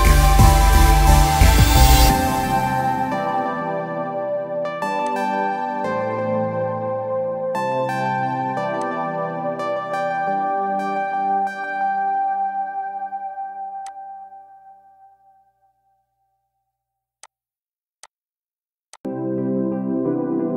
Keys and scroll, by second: 15.0 Delete, 19.0 ctrl+-, 19.0 ctrl+=, 19.7 ctrl+-.